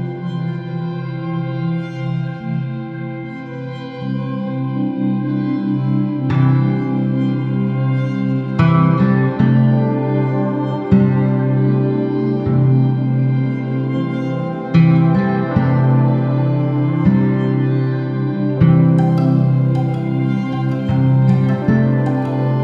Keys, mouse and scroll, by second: 1.6 shift+click, 2.7 s, 4.5 click, 4.7 g, 6.4 click, 6.6-7.0 scroll down 1, 7.0-12.4 middle drag, 11.5 scroll down 1, 12.4 click, 12.8 Tab, 13.8 click, 14.2 shift+z, 15.0 shift+a, 16.0 s, 18.7 click, 19.1 s, 20.7 KP_7, 21.3 s.